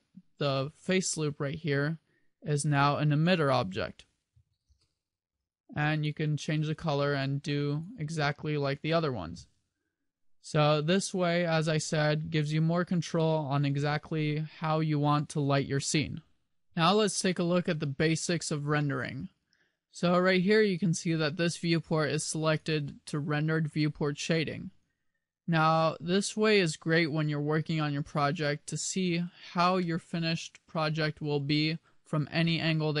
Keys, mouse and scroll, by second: 2.8 click, 5.3 click, 21.9 click, 22.7 click, 27.1 middle click, 30.0 middle click, 32.6 middle click.